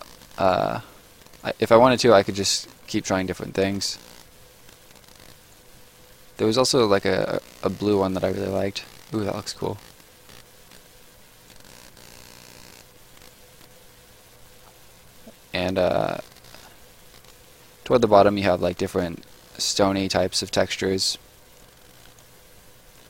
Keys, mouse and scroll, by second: 1.2 right click, 1.9 click, 2.6 right click, 3.7 click, 4.7 scroll down 1, 4.8 right click, 5.9-6.9 scroll down 1, 6.9 click, 8.7 right click, 11.5 click, 13.1 right click, 13.6-15.6 scroll down 1, 15.6 click, 17.1 right click, 18.6 click, 19.9 right click, 20.8-21.5 scroll up 1, 21.5 click, 22.5-22.9 scroll up 1, 22.9 click.